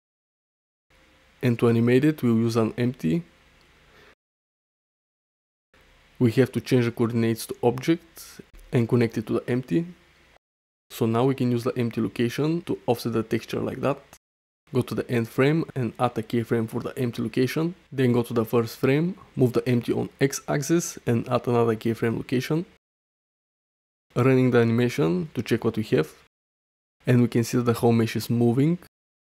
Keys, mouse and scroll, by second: 0.3 shift+middle click, 0.9 shift+a, 3.2 click, 5.5 click, 6.8-7.9 drag, 10.9 g, 11.1 x, 13.6 shift+Right, 14.6 i, 17.3 shift+Left, 18.0 g, 18.4 x, 20.4 i, 21.8 space, 25.9 middle click, 27.3-28.1 shift+middle drag.